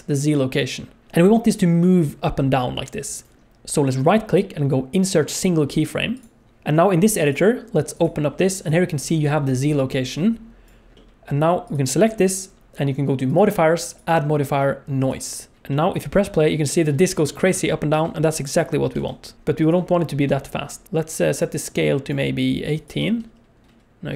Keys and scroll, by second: 16.2 space, 17.1 space, 17.5 space, 17.9 space, 19.0 space, 19.3 space, 23.1 space.